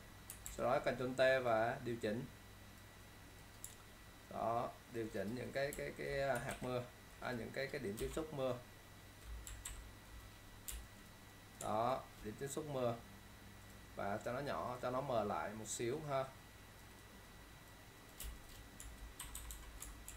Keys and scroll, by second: 0.6 ctrl+t, 6.6 ctrl+alt+shift+z, 9.7 ctrl+0, 10.9 ctrl+space, 18.9 space, 19.3 ctrl+-.